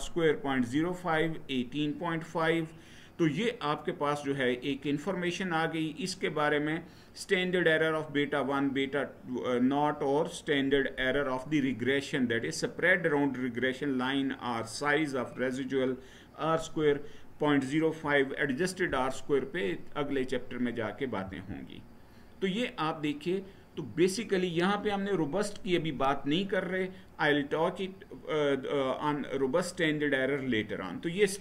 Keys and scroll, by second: 21.0 Right.